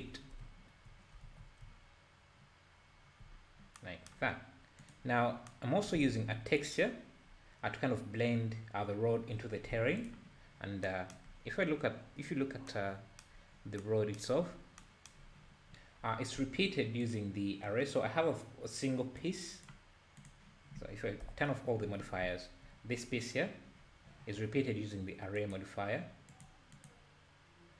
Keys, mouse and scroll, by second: 0.2 scroll down 3, 0.4 `, 1.3 alt+a, 1.5 scroll down 1, 3.1 middle click, 3.3-3.8 scroll up 3, 4.8 click, 5.2-5.5 scroll up 4, 6.0 alt+a, 6.6 click, 7.3-7.6 scroll up 3, 7.6-9.6 scroll down 2, 9.8 alt+a, 10.0 click, 11.6-12.6 scroll down 14, 13.5 scroll down 4, 14.5-14.8 scroll down 1, 15.6-16.5 scroll up 14, 17.0-20.3 drag, 21.2 KP_Divide, 22.2 `, 25.4 click, 26.3 click, 26.8 click.